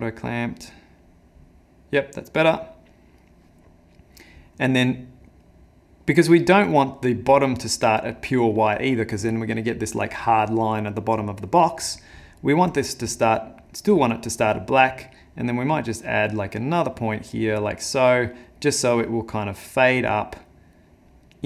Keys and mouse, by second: 1.0 click, 5.5 click, 13.1 click, 14.9 click, 19.8 click.